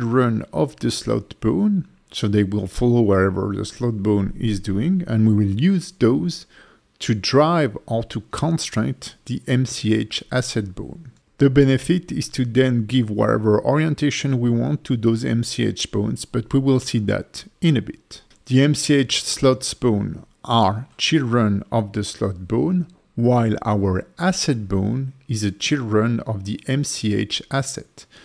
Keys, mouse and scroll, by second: 5.3 ctrl+F2, 9.1 KP_0, 10.9 alt+middle click, 13.2 click, 13.9 click, 14.3 click, 14.7 click, 15.4 shift+click, 16.4 ctrl+p, 18.1 click, 18.2 click, 19.1 shift+click.